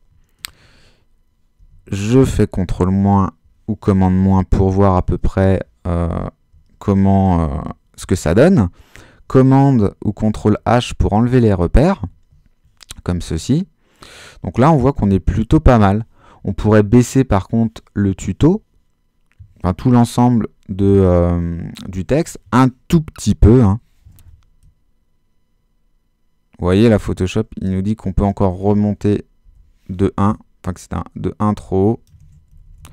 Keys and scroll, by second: 1.6 super+-, 8.0 super+h, 10.0 super+h, 23.3 Down, 29.4 shift+Down, 30.0 shift+Down, 32.5 shift+super++.